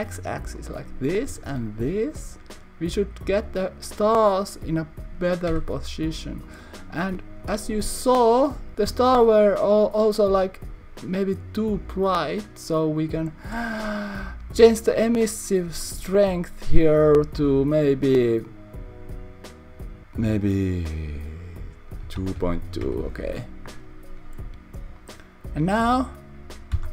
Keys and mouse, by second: 0.6 click, 1.3 s, 1.5 z, 2.9 click, 5.7 Tab, 6.6 click, 11.8 click, 13.0 click, 15.4-24.1 drag, 25.1 click.